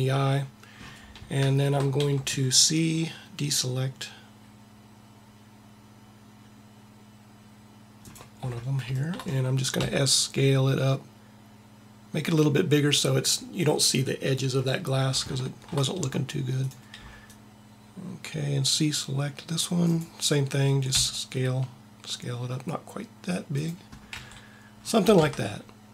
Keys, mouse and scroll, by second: 2.0 c, 9.7 s, 17.0 c, 17.3 c, 20.8 s, 21.0 s, 24.2 a, 25.2 Tab.